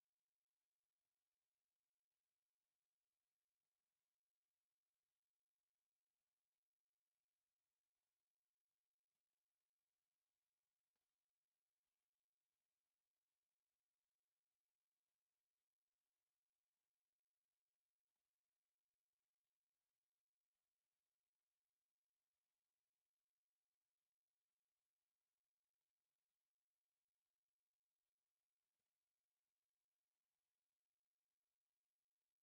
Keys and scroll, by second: 0.0-0.9 typing, 0.4 Escape, 3.2 Escape, 6.5 Escape, 9.9 Escape, 12.5 t, 12.7 space, 13.6 Escape, 14.0 e, 14.1 space, 15.2 Escape, 16.7 Escape, 19.6 s, 20.6 1, 21.2 e, 21.4 space, 21.8 Escape, 26.3 Escape, 28.0 Escape, 28.3 c, 29.0 Escape, 31.4 c, 31.7 space.